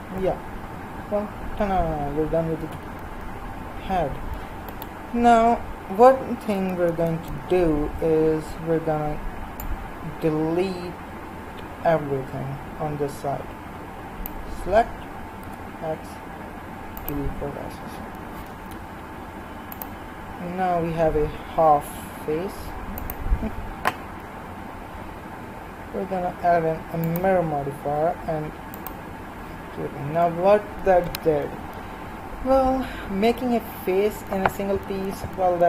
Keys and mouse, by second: 2.8 z, 4.7-7.3 right drag, 7.3 b, 15.4 x, 23.4-27.2 right drag.